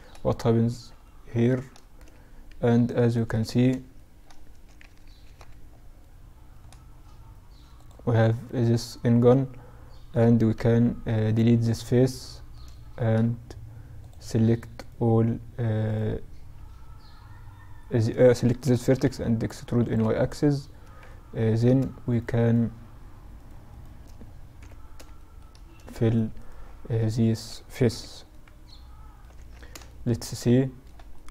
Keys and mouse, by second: 1.6 shift+b, 3.9 KP_Add, 6.8-8.7 drag, 7.3-9.2 right drag, 7.9-10.8 middle drag, 9.5 x, 12.0 middle click, 13.0-16.4 drag, 13.8-17.7 right drag, 17.7 e, 20.1 middle click, 21.1-24.9 right drag, 23.6 f, 24.9 middle click, 25.0-26.8 right drag, 26.9 f, 27.3 right click, 27.4 middle click, 27.5 right click, 27.5 middle click, 27.7 right click, 27.9 right click, 28.1-31.3 middle drag, 28.4 Tab.